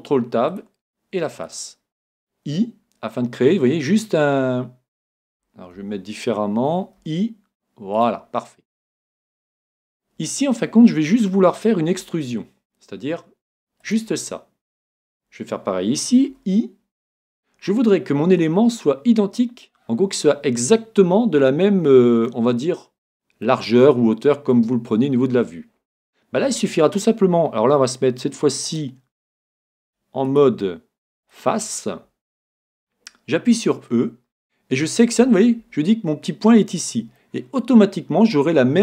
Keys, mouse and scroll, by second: 1.5 right click, 8.2-10.0 drag, 8.6-10.6 middle drag, 11.9 e, 13.9-15.7 drag, 15.0 right click, 16.3 |, 17.5-19.3 drag, 22.3-25.6 middle drag, 25.6 middle click, 28.7-32.1 drag, 34.0 e, 37.2-38.8 middle drag.